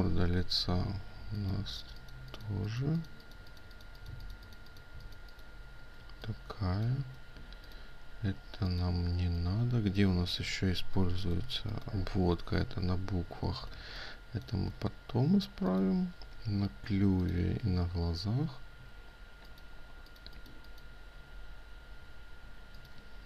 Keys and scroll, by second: 14.2 ctrl+space.